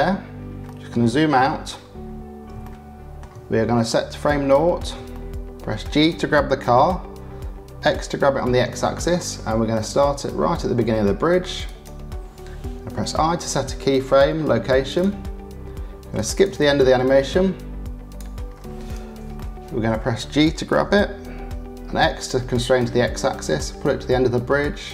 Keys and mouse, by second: 0.6 click, 2.6 shift+middle click, 5.1 shift+middle click, 6.6 g, 15.0 i, 16.1 click, 16.6-18.1 drag, 19.3 shift+middle click, 20.7 g.